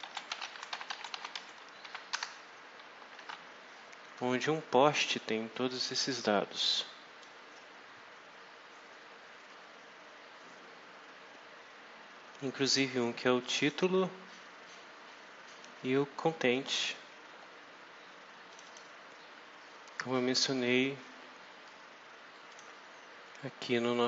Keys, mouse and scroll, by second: 0.0-2.2 typing, 3.1 alt+Tab, 5.6-7.3 drag, 8.2 scroll down 2, 9.4 scroll up 2, 13.3 click, 16.2-16.6 scroll down 2, 16.8 scroll down 2, 17.2 scroll up 2, 18.4 click, 22.4 click.